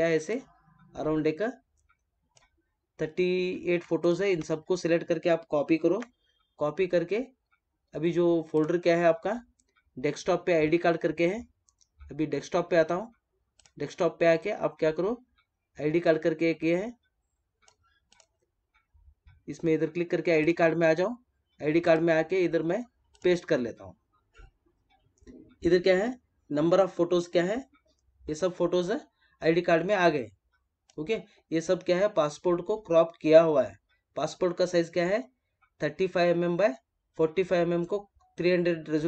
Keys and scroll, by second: 5.8 ctrl+c, 23.7 space.